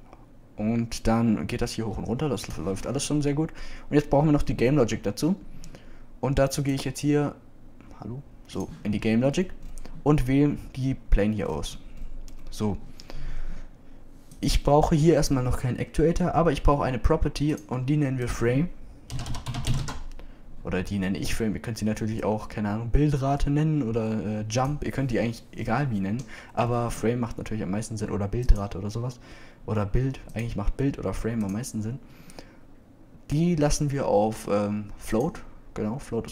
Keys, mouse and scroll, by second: 10.3-12.3 middle drag, 12.5-12.9 middle drag.